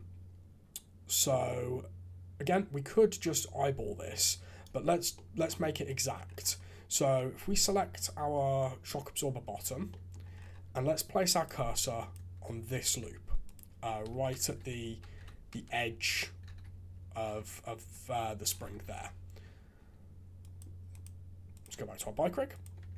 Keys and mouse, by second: 5.1 click, 5.8 click, 7.1 click, 9.6 Tab, 9.9 click, 11.4 alt+click, 12.8 shift+s, 14.2 KP_3, 14.4 shift+z, 15.1 alt+a, 15.5 KP_3, 15.9 shift+z, 16.5 shift+z, 17.8 Tab, 18.8 alt+a, 20.4 click, 20.9 click, 21.5 click, 22.8 Tab.